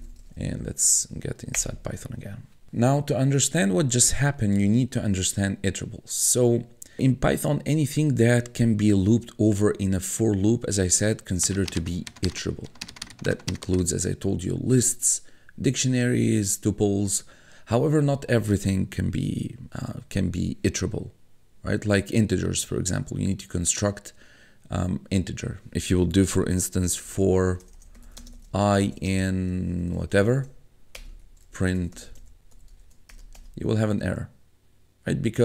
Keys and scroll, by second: 0.8 Up, 1.6 Return, 26.5-33.3 typing, 31.0 Return, 31.1 Tab.